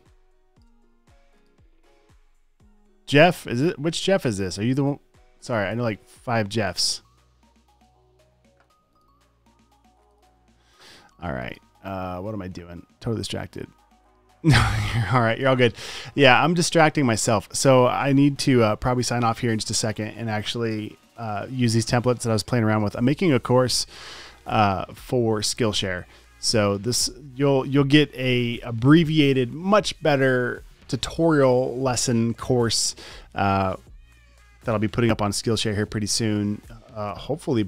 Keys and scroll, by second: 0.2 space, 0.6 space, 1.0 space, 9.0 v.